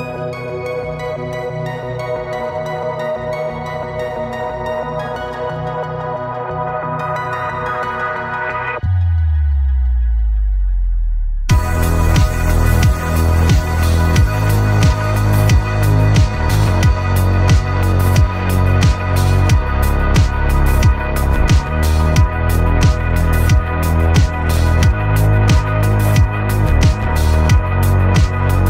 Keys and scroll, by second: 15.8 ctrl+h.